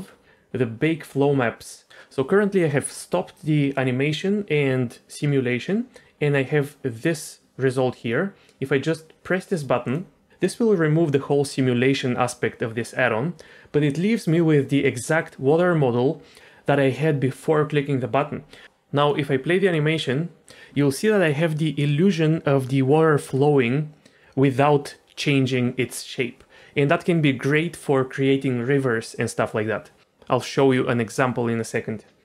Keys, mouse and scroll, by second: 9.8 click, 18.6 space, 19.0 click, 23.5 click, 26.6 space, 26.9 click, 30.0 space.